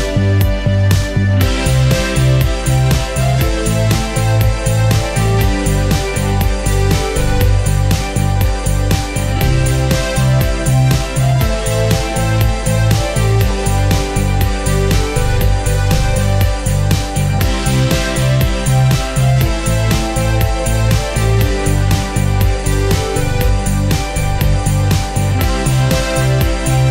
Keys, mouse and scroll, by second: 2.6 ctrl+z, 3.6-9.1 drag, 9.1 scroll down 1, 9.8-12.2 drag, 12.2 scroll up 1, 14.4-15.8 drag, 15.8-16.4 scroll down 1, 16.6 ctrl+space, 16.8-17.5 scroll down 1, 17.5 click, 18.0-18.6 scroll up 1, 20.2 click, 20.5 scroll up 1, 22.1 F10, 22.5-26.9 drag.